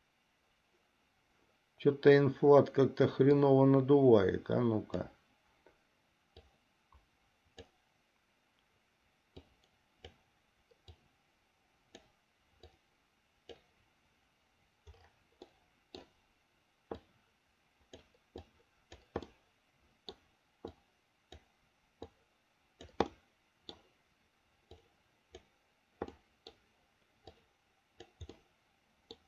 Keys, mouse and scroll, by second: 3.5-5.2 drag, 6.7-8.0 drag, 9.6 click, 11.2-12.2 drag, 12.9 click, 15.8 middle click, 17.2-18.2 drag, 18.7 click, 19.6 middle click, 21.0 click, 22.3 click, 23.3 middle click, 25.0 click, 26.4 middle click, 27.5 click, 28.6 middle click.